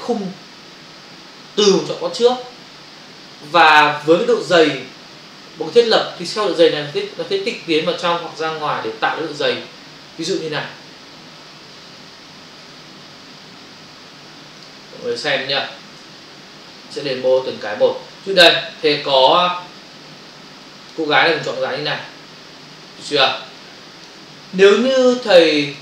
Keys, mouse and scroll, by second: 12.7 alt+Tab, 14.6 click, 15.0 click, 15.2 double click, 16.0 f, 17.3 click, 19.2 ctrl+space, 21.0 space, 25.1 ctrl+click.